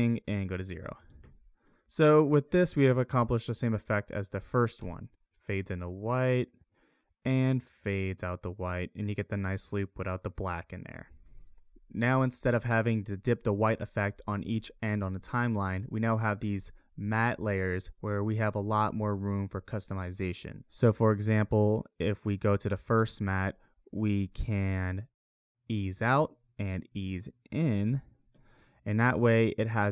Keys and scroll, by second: 4.8 space, 11.0 space.